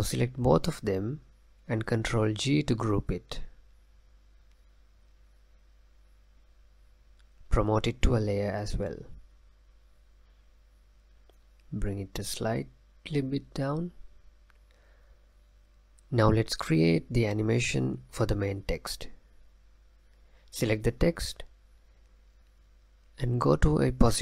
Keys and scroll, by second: 5.4 ctrl+g.